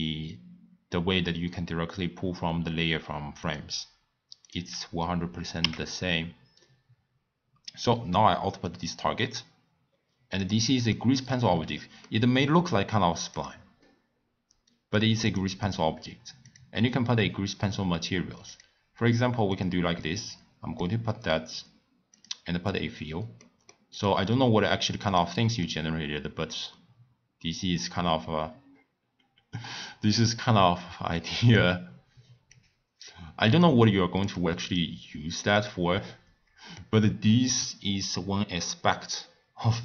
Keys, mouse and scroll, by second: 4.7 click, 6.0 x, 7.9-8.7 drag, 9.3 scroll down 1, 9.4 scroll up 1, 9.5-10.2 scroll down 5, 10.4 click, 10.9-11.4 middle drag, 11.4-11.8 scroll up 5, 12.1-12.6 middle drag, 12.6-13.1 scroll down 3, 13.3 click, 13.8-15.2 middle drag, 15.2 click, 16.4 click, 18.5-19.6 drag, 22.1 click, 23.3 scroll up 1, 23.4 scroll down 1, 23.4 middle click, 23.7 scroll up 2, 23.8 scroll down 1, 23.9 click, 24.0-24.5 scroll up 2, 24.6-25.0 scroll down 4, 25.0 click, 25.6-28.7 middle drag, 32.5 click, 33.4 click, 34.7 click, 35.6-38.8 middle drag.